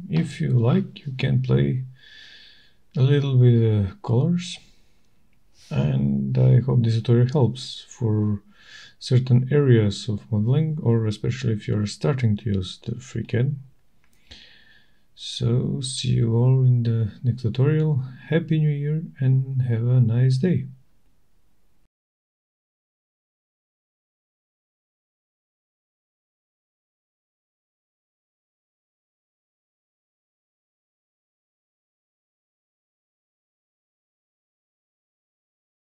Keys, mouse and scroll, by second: 2.0 middle click, 3.2 shift+right click, 4.6 middle click, 5.4 shift+right click, 5.4 middle click, 6.8 shift+right click, 7.8 shift+right click, 8.7 shift+right click, 9.8 middle click, 12.3 click, 14.8 shift+right click, 15.9 middle click, 16.6 shift+right click, 17.6 middle click, 20.1 click, 25.2 right click, 26.8 click, 29.9 click.